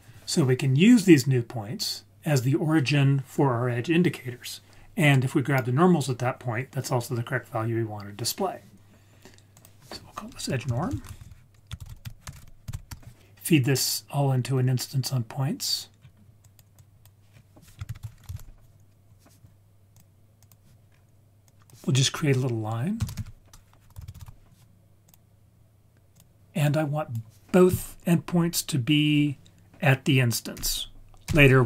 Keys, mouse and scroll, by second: 0.4-0.7 scroll up 1, 2.2-2.7 scroll down 2, 9.5-12.9 drag, 12.3 BackSpace, 16.0-16.6 scroll down 3, 16.4 click, 16.7-17.3 drag, 17.3-17.9 scroll up 2, 17.9 shift+a, 20.9-21.4 scroll up 1, 21.4-25.1 drag, 21.4-23.1 scroll up 1, 26.1 drag, 26.6-31.2 drag.